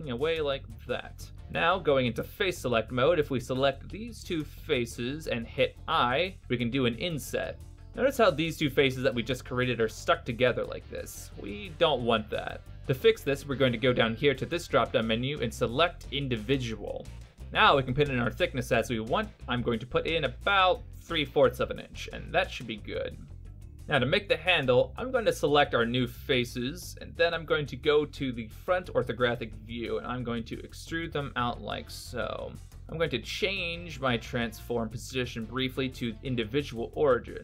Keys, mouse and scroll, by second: 3.1 3, 4.5 right click, 5.0 shift+right click, 6.5 i, 12.0 i, 15.0 click, 20.5 click, 28.6 KP_1, 30.2 e, 32.7 shift+middle click, 36.0 click.